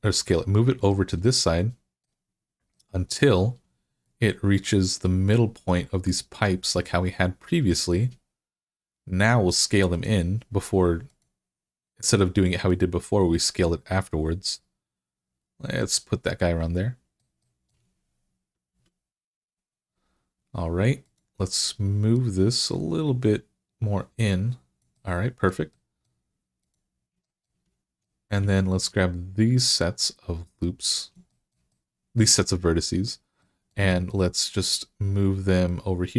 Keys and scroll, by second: 18.5 1.